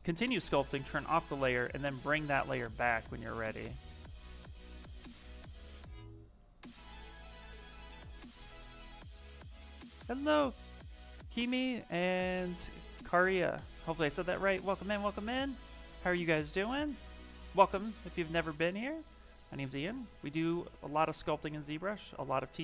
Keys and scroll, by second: 2.2 s.